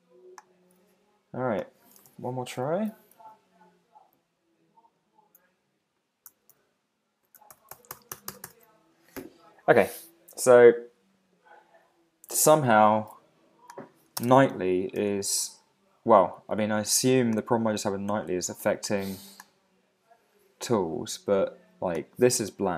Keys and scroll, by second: 2.6 Return, 6.5 alt+super+i, 14.2 super+space, 15.0 Return.